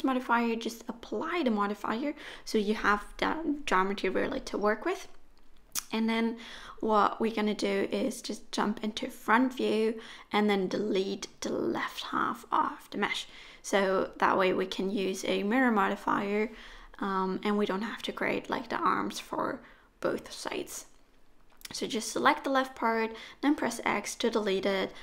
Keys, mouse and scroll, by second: 1.1 middle click, 2.4 Tab, 2.7 middle click, 4.2 Tab, 6.0 click, 8.7 middle click, 9.4 Tab, 9.7 middle click, 10.6 alt+a, 11.0 middle click, 12.5 KP_1, 13.4 z, 15.8 click, 17.7 x, 18.9 Tab, 19.8 click, 22.3 middle click, 22.7 Tab, 23.2 middle click.